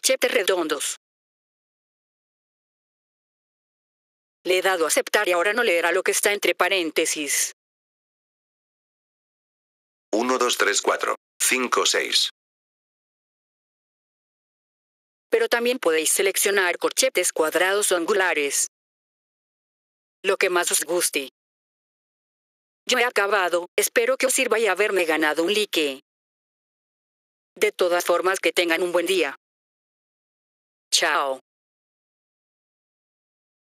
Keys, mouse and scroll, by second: 3.0 click, 4.0 F4, 4.3 click, 9.2 click, 14.8 F4, 15.2 click, 17.2 click, 17.6 click, 18.6 click, 20.9 click, 21.9 click.